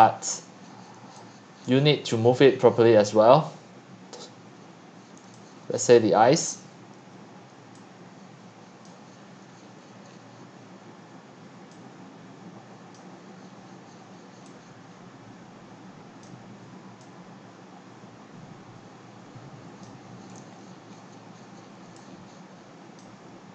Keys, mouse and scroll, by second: 0.0-0.3 drag, 1.7-2.1 drag, 2.1-5.3 middle drag, 5.8 click, 5.9 x, 6.5 q, 8.8 click, 9.5-11.7 scroll down 3, 11.7-12.1 scroll down 1, 12.1 click, 12.9-17.5 right drag, 17.5-20.3 drag, 20.3-20.9 scroll down 6, 21.0-21.8 scroll up 5, 21.8 scroll up 1, 21.9-22.9 x, 23.0 click, 23.0 x, 23.2-23.5 drag.